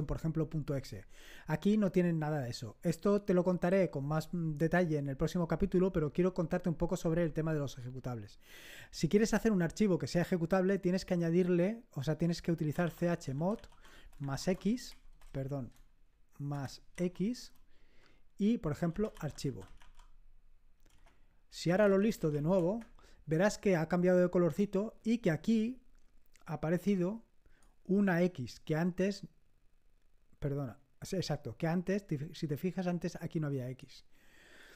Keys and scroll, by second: 12.4-15.2 typing, 16.9 x, 17.3 space, 18.5-20.2 typing, 20.8 Return, 21.4-22.7 typing.